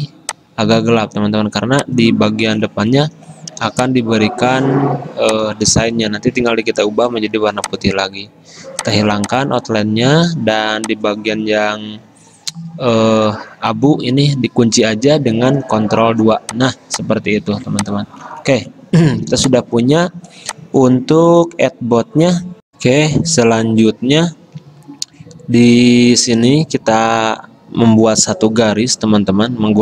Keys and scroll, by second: 3.8 space, 12.0 ctrl+z, 16.0 ctrl+2, 17.6 ctrl+z, 19.5 space.